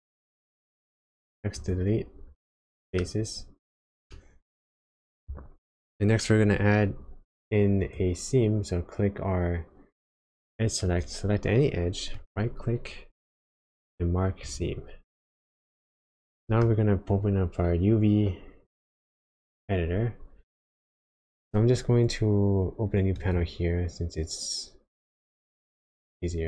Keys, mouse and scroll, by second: 2.4 middle click, 3.5-4.0 scroll up 3, 4.1 shift+middle click, 5.2 scroll down 1, 7.8 click, 12.2 right click, 15.4 middle click, 17.0-18.4 scroll down 1, 23.2 right click.